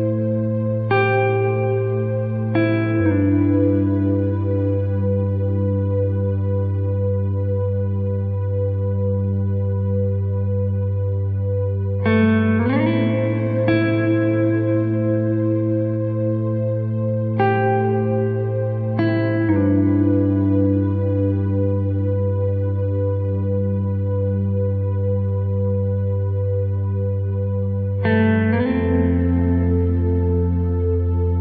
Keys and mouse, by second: 0.0 e, 0.7 r, 1.8 s, 2.8 g, 4.2 r, 5.9 shift+middle click, 6.5 r, 8.9 e, 9.7 g, 10.8 s, 12.2 shift+middle click, 12.6 s, 14.2 KP_1, 15.4 shift+middle click, 16.1 g, 17.8 s, 19.0 g, 19.6 alt+z, 24.8 alt+right click, 25.2 g, 26.7 s, 28.5 g, 29.0 shift+middle click, 29.9 right click, 30.3 g.